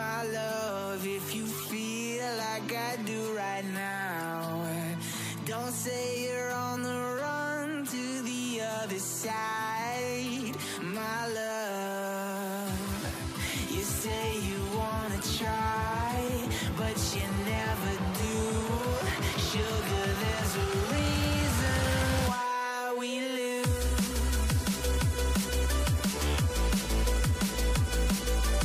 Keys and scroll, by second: 26.1 ctrl+l, 27.2 ctrl+v, 28.1 Return.